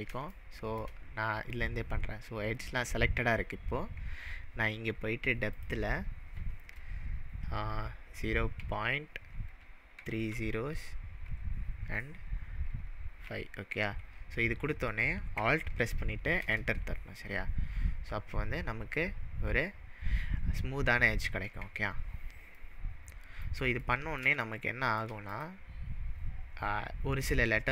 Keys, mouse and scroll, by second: 0.4-0.9 shift+middle drag, 5.5-8.6 drag, 10.0-11.3 typing, 13.2 5, 16.4 alt+Return, 22.6-23.4 middle drag, 25.3 click, 25.7-27.5 scroll up 7, 27.5-27.7 scroll down 3.